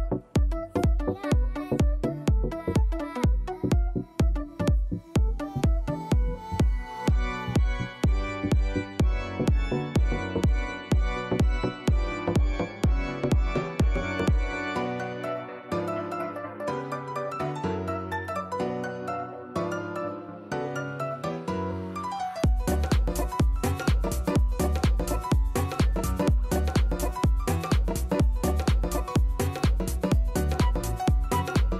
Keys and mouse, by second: 3.2 click, 4.4 KP_1, 4.6 Return, 6.9 click, 8.3 click, 10.3 click, 13.0-15.7 alt+drag, 15.9 alt+right click, 16.1 alt+middle click, 16.3 alt+click, 18.0 KP_1, 18.1 KP_8, 19.0 alt+click, 19.6 alt+right click, 19.8 alt+click, 20.0 alt+middle click, 20.6 alt+right click, 20.8 alt+click, 21.3 alt+right click, 21.6-23.3 alt+drag, 23.4 alt+click, 23.6 alt+middle click, 23.9-25.4 alt+right drag, 25.5 alt+click, 26.0 alt+right click, 26.1 alt+click, 26.4 alt+click, 26.9 alt+right click, 27.1 alt+click, 27.4 alt+right click, 27.6 alt+middle click, 27.8 alt+right click, 28.0 alt+click, 28.8 click, 29.7 click, 30.9 BackSpace.